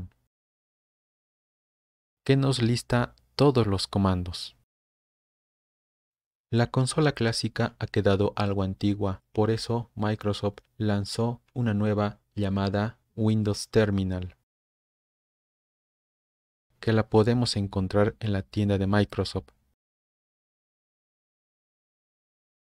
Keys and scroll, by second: 0.2 Tab, 0.2 typing, 1.2 Return, 14.2-14.9 typing, 15.4 Return.